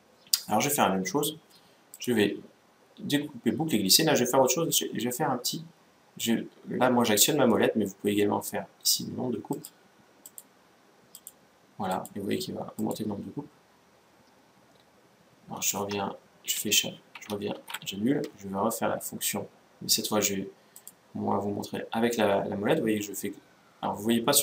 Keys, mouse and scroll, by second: 1.6-3.3 drag, 10.0-14.2 drag, 16.3 Escape, 17.2 ctrl+z, 20.4-22.2 drag.